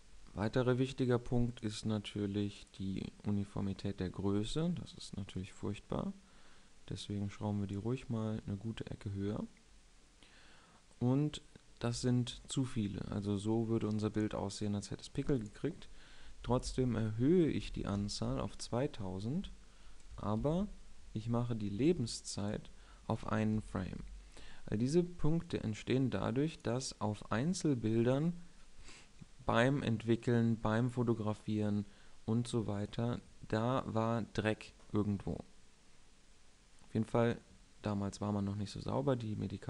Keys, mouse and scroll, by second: 2.2-2.7 drag, 2.7-5.5 middle drag, 5.5-7.4 drag, 20.6 shift+Left, 25.6-27.4 drag.